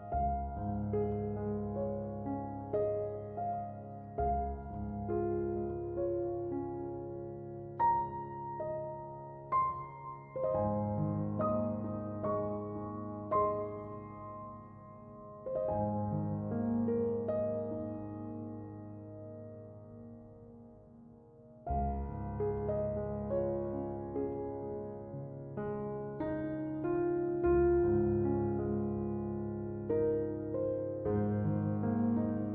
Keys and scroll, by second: 30.7 2, 31.0 Return.